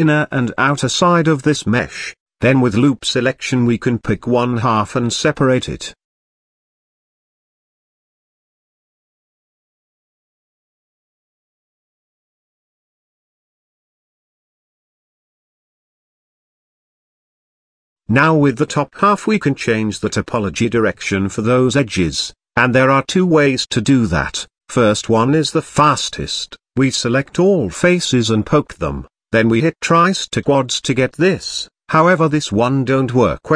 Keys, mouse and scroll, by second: 0.6-1.0 scroll down 2, 1.0-3.4 middle drag, 3.4-5.9 drag, 8.7 3, 10.1 p, 11.4 Tab, 11.7 click, 12.4 g, 13.8 click, 14.4 g, 15.9-18.2 middle drag, 18.2 Tab, 21.9 Tab, 22.8-23.3 middle drag, 23.3-25.0 scroll up 1, 27.2 Tab, 28.0 a, 30.8-32.3 right drag, 32.3-33.2 shift+middle drag, 33.2-33.5 scroll up 1.